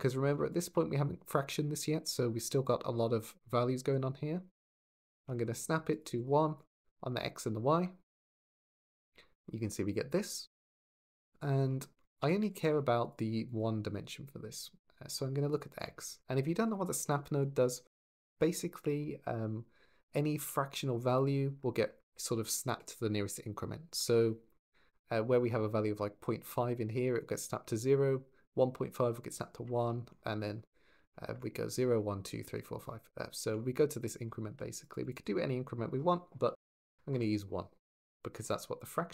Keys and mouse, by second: 0.3 ctrl+shift+click, 4.9 ctrl+shift+click, 5.7 click, 6.3 click, 9.1 shift+middle click, 10.1 shift+middle click, 11.1-11.8 drag, 11.9 shift+a, 13.3 click, 14.9 click, 34.7 click, 36.2 ctrl+z.